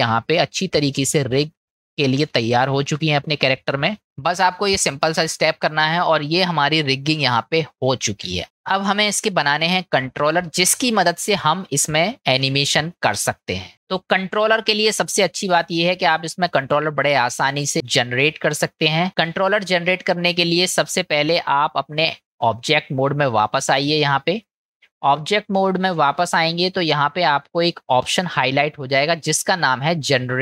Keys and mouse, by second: 6.1 middle click, 9.8-11.8 middle drag, 15.6-16.7 middle drag, 17.6-19.0 middle drag, 21.9-23.5 drag, 24.5-25.7 middle drag.